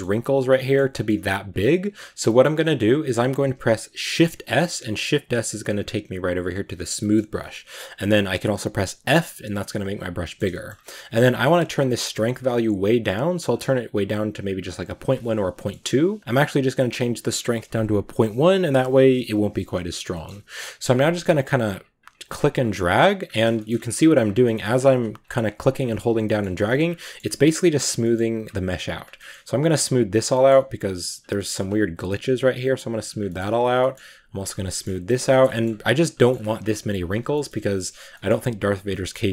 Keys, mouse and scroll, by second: 1.4 click, 2.0 scroll down 1, 2.1-4.0 middle drag, 4.0 shift+s, 6.8-8.8 middle drag, 8.8 f, 10.1 middle click, 10.5 scroll up 2, 12.3-15.4 drag, 15.4-17.5 shift+middle drag, 17.5-19.9 drag, 19.9 scroll up 1, 20.0 middle click, 20.9-23.1 drag, 23.1 scroll down 2, 23.2 shift+middle click, 23.5-23.8 shift+scroll up 2, 23.8 click, 24.3 shift+middle click, 24.6 shift+scroll up 1, 24.7-26.0 drag, 26.0 scroll down 1, 26.1 shift+middle click, 26.4 click, 26.9 shift+middle click, 27.6 click, 28.0 scroll up 1, 28.3 click, 29.0 middle click, 29.3 click, 30.2 middle click, 30.4-33.0 drag, 33.0 scroll down 1, 33.1 middle click, 33.4 click, 33.6 shift+middle click, 33.9 click, 34.4 scroll down 1, 34.5 middle click, 34.8 click, 35.3 shift+middle click, 35.5-36.4 scroll up 3, 35.7 click, 36.0 shift+middle click, 36.4 click, 37.1 scroll down 1, 37.2 shift+middle click, 37.5 click, 37.9 scroll down 1, 38.0 middle click, 38.1-38.4 scroll up 1, 38.4 click, 38.8 shift+middle click.